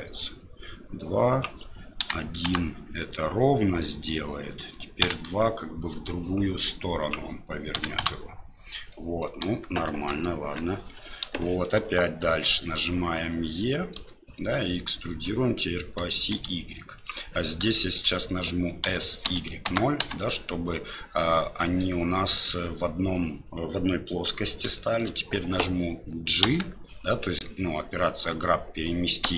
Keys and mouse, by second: 1.3-6.1 drag, 5.0 KP_2, 7.0-8.6 drag, 9.0 middle click, 9.4 KP_1, 10.2 KP_3, 11.5 shift+middle click, 13.9 e, 17.8 shift+middle click, 18.8 s, 20.0 KP_Decimal, 24.8 shift+middle click, 26.4 g.